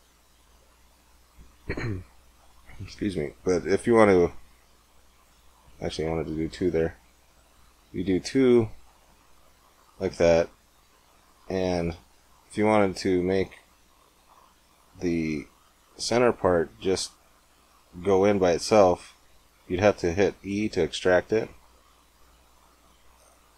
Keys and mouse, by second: 5.8 ctrl+z, 7.0 ctrl+r, 9.4-13.7 drag, 13.7-15.4 middle drag, 15.4 click, 15.9-17.7 middle drag, 17.7 click, 20.4 e.